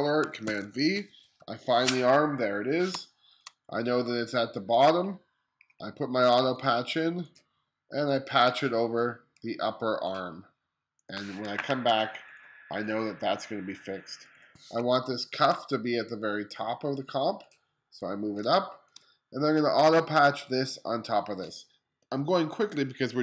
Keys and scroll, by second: 0.0 super+v, 1.0 o, 2.0 1, 2.5 space, 14.7 space, 18.0 space.